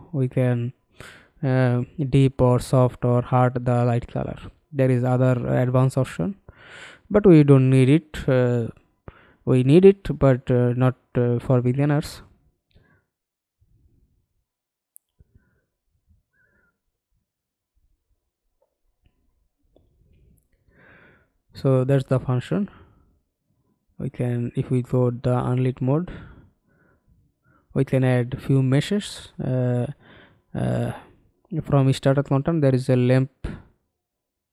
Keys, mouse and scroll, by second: 0.4-1.1 scroll down 2, 1.1-1.8 scroll down 1, 1.8-3.4 scroll down 11, 3.4-5.5 scroll down 14, 5.5-5.8 scroll down 1, 5.8-8.2 scroll up 12, 8.2-8.8 scroll down 1, 8.8-9.1 scroll down 1, 9.1-9.7 scroll up 5, 9.7 scroll up 3, 9.7-11.5 scroll down 11, 11.5-11.8 scroll down 3, 11.8 middle click, 13.1-13.7 scroll up 2, 13.7-15.6 scroll down 8, 15.6 scroll up 1, 15.7-16.3 scroll down 3, 16.3 middle click, 18.4 middle click, 19.7 middle click, 20.3 middle click, 20.4-21.0 scroll up 2, 21.0-22.1 scroll down 2, 24.5 middle click, 25.7 F11, 26.7 F11, 27.9 ctrl+space.